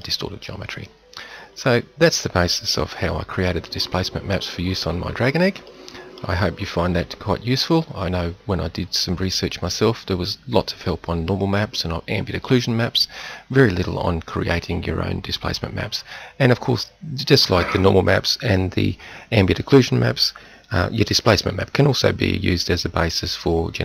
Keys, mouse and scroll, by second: 0.6-1.7 middle drag, 2.8 KP_7, 6.9 Tab.